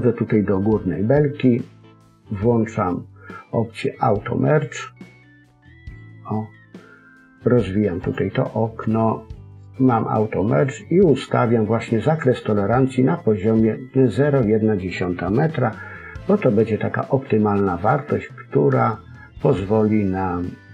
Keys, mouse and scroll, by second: 4.5 click, 7.9 click.